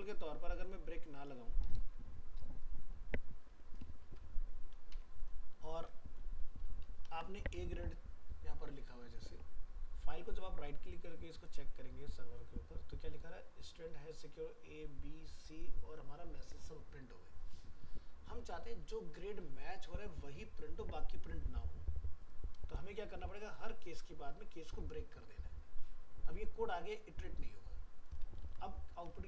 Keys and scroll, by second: 6.4 ctrl+s, 23.0 ctrl+z, 28.4 ctrl+s, 29.1 alt+Tab.